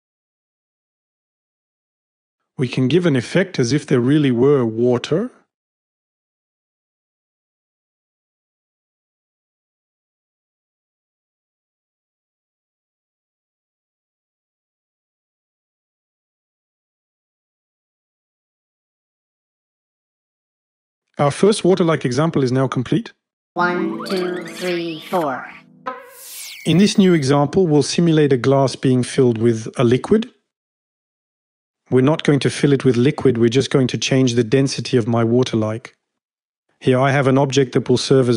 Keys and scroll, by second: 2.9 space, 6.3 super+d, 8.5 space, 10.2 super+d, 10.6 m, 13.5 shift+Page_Down, 13.5 shift+Page_Down, 13.7 shift+Page_Up, 13.8 shift+Page_Up, 14.1 Home, 14.1 0.